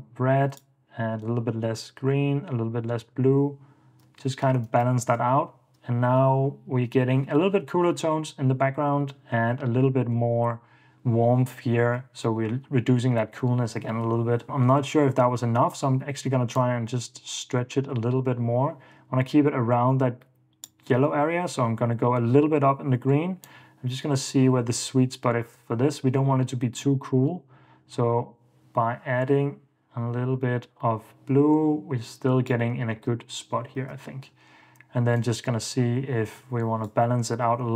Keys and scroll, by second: 3.3 super+d, 4.5 super+d, 5.1 super+d, 9.6 super+d, 12.0 super+d, 12.6 super+d, 33.1 super+d, 34.0 super+s.